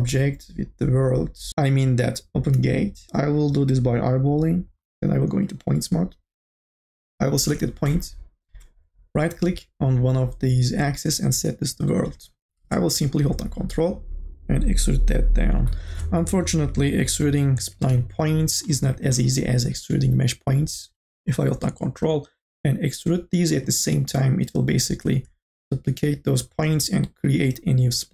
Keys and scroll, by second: 7.7 e, 16.0 ctrl+z.